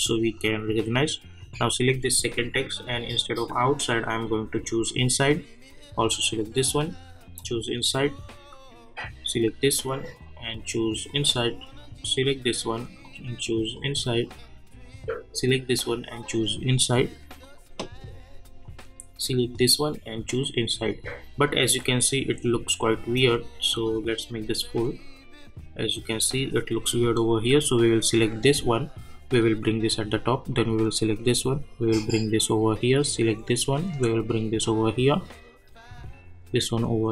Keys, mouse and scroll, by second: 9.2 click, 23.7 click, 27.7-37.1 drag.